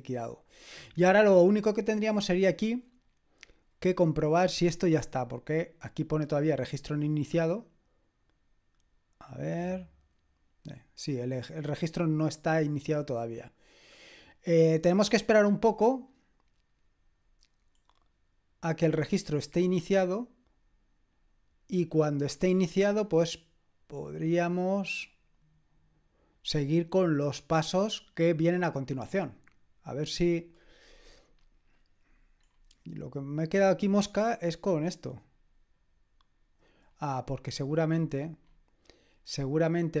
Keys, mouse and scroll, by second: 1.3-2.2 scroll down 2, 2.2-4.5 scroll up 1, 4.5 click, 21.9-23.0 scroll down 2, 23.0-25.2 scroll down 1, 25.2-25.9 scroll up 1, 25.9-26.7 scroll down 2, 30.8-32.6 drag, 32.6-36.8 scroll up 2, 36.8-37.9 scroll down 2, 37.9-39.2 scroll up 2, 39.2-40.0 scroll up 1.